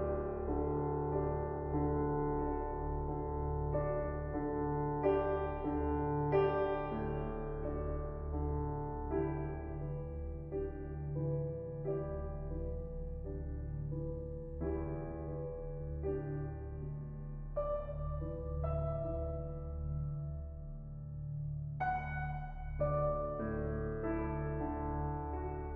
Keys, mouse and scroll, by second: 4.5-6.1 middle drag, 6.1-6.5 scroll up 8, 8.2-11.2 drag, 14.7 KP_0, 17.4-21.2 drag, 21.7-24.6 drag.